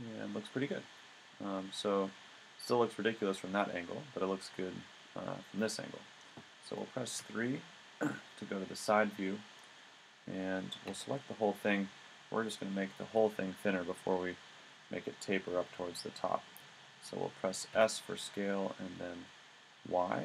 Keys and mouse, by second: 1.0 click, 3.2 middle click, 6.1 middle click, 7.0 middle click, 7.2 KP_3, 10.9 a, 14.4-15.7 middle drag, 17.7 s.